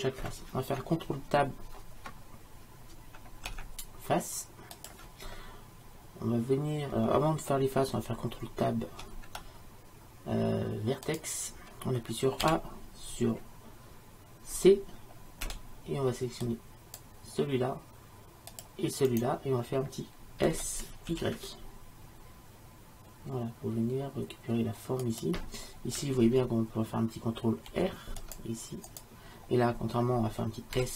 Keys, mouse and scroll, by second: 3.6 ctrl+Tab, 9.1 ctrl+Tab, 12.5 a, 15.5 c, 20.5 s, 27.8 ctrl+r, 30.8 s.